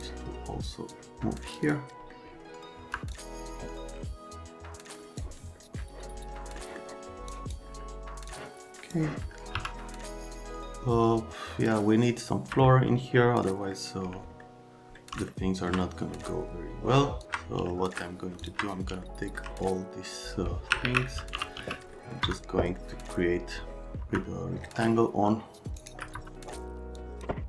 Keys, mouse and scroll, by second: 0.9 click, 1.6 click, 2.8 F3, 3.1 click, 6.6 scroll up 1, 7.3 click, 8.2 click, 9.5 1, 10.6 alt+middle click, 13.5 middle click, 14.4 alt+middle click, 17.2 ctrl+click, 17.7 alt+middle click, 18.4 ctrl+click, 18.4 middle click, 19.0 alt+middle click, 19.6 middle click, 20.8 alt+q, 21.1-22.1 typing, 21.9 right click, 22.2 F3, 22.7 right click, 24.0 F3, 24.9 alt+middle click, 25.8 alt+right click, 26.1 F3, 26.9 click.